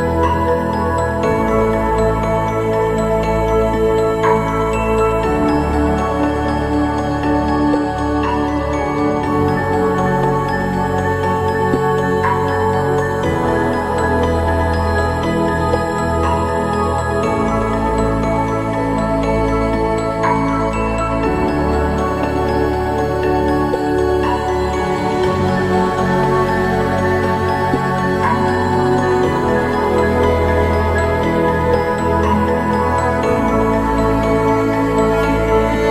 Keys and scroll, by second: 0.7 ctrl+-, 0.8 ctrl+-, 1.5 ctrl+=, 6.3 ctrl+0, 9.4 ctrl+=, 9.6 ctrl+=, 9.9 ctrl+=, 11.4 ctrl+=, 11.7 ctrl+=, 28.5 ctrl+=.